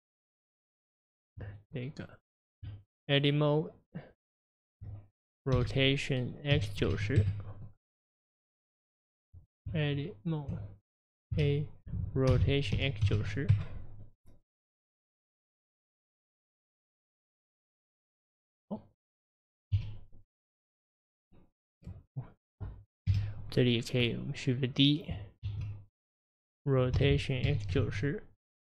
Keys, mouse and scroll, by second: 1.5 Tab, 1.5 Left, 1.5 click, 2.1 Left, 6.9 KP_0, 7.2 KP_Enter, 11.3 a, 12.3 r, 17.3-18.2 scroll down 4, 18.2 middle click, 19.0-19.3 scroll down 2, 19.8 KP_1, 20.5-21.6 scroll down 3, 22.0-22.4 scroll up 4, 22.4 middle click, 23.1 KP_Divide, 23.7-24.1 scroll down 2, 24.1-25.5 middle drag, 25.5 shift+d, 27.0 r.